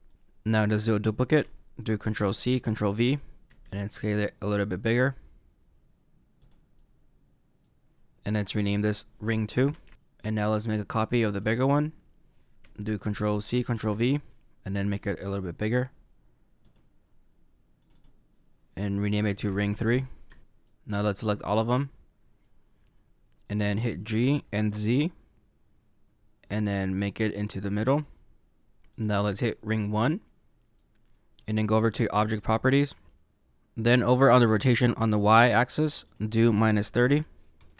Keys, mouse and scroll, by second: 1.9 ctrl+c, 2.7 ctrl+v, 3.4 s, 6.7 middle click, 8.6 click, 8.7 click, 9.9 middle click, 11.3 click, 12.9 ctrl+c, 13.7 ctrl+v, 14.8 s, 17.7 click, 17.8 click, 20.4 middle click, 21.2 click, 22.3 middle click, 24.0 g, 28.8 click, 29.6 middle click, 32.3 click, 33.3 ctrl+z, 36.0 click.